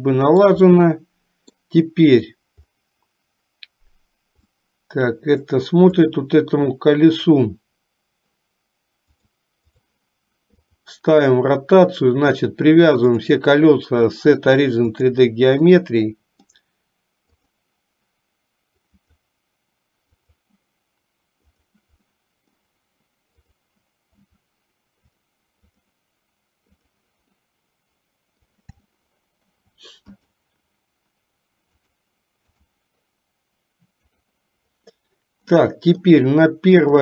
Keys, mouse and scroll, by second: 0.0-1.6 shift+middle drag, 4.7-5.8 middle drag, 6.2 click, 9.4 click, 10.8 click, 13.4-15.3 drag, 15.9 middle click, 17.4 click, 19.1-21.9 drag, 22.3 middle click, 23.6 click, 25.2-27.2 drag, 27.5-28.6 middle drag, 29.1 shift+middle click, 30.4 click, 31.9-34.4 drag, 35.2-36.3 middle drag, 36.9 click.